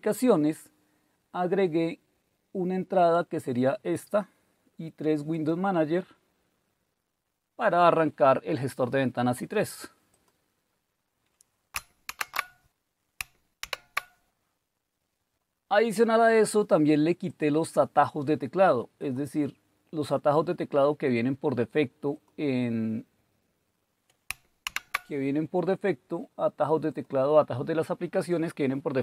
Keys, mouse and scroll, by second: 3.0 click, 5.3 click, 10.1 click, 12.1 shift+super+q, 13.6 super+e, 17.2 click, 18.9 click, 22.1 click, 24.7 super+w, 26.9 click.